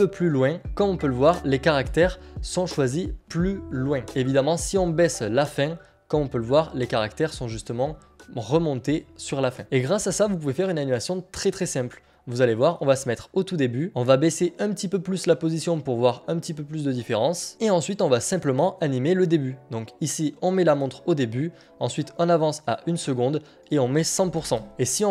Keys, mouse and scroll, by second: 2.2 click, 3.6 click, 7.9 click, 13.9 click, 17.4 scroll, 22.2 click.